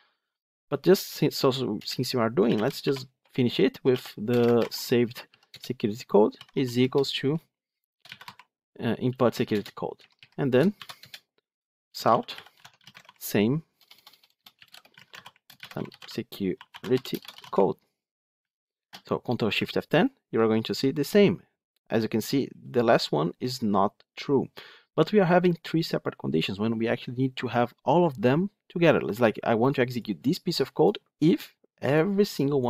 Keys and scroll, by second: 5.4 Return, 12.4 Tab, 18.7 ctrl+shift+F10.